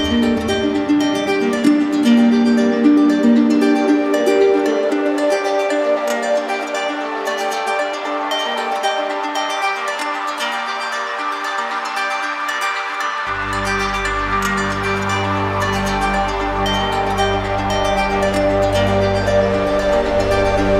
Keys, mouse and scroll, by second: 2.0 click, 4.8 alt+click, 6.0 alt+click, 7.2 alt+click, 8.2 alt+click, 10.4 alt+click, 10.9 alt+click, 14.8 alt+click, 15.6 alt+click, 18.7-19.8 drag.